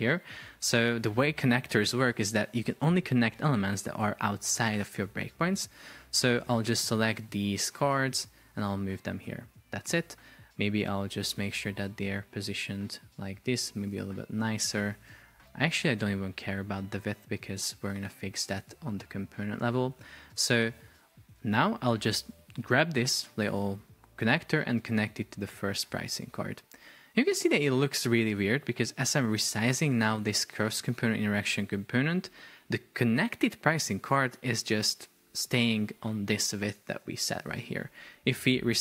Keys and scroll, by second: 0.7 Escape, 15.5 super+z.